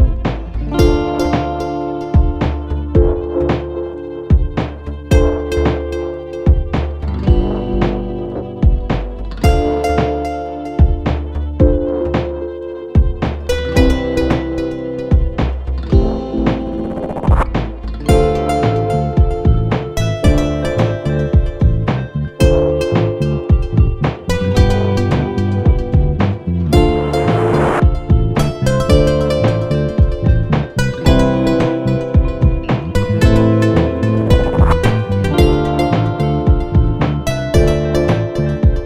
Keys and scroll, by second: 2.2 ctrl+d, 9.1-10.3 typing, 13.3 typing, 22.7 ctrl+=, 28.2 ctrl+-, 32.2 ctrl+z, 36.1-37.7 typing, 38.7-38.8 typing.